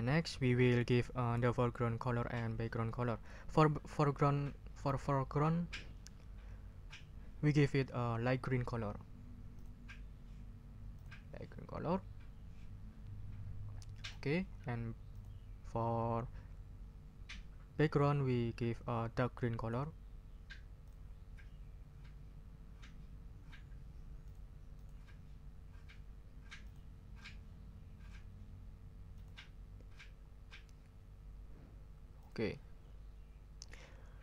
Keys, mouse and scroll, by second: 9.5 click, 10.9 click, 14.0 click, 15.1 click, 20.8 click, 24.2 click, 24.7 click, 26.6 click, 29.1 click, 32.2 click.